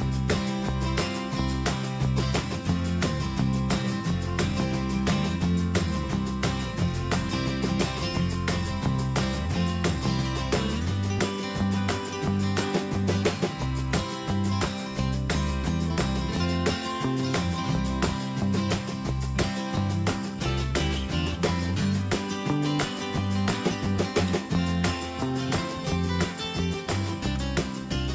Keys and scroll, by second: 4.6 ctrl+Return, 5.8 ctrl+alt+shift+n, 8.1 ctrl+d, 24.3 ctrl+t.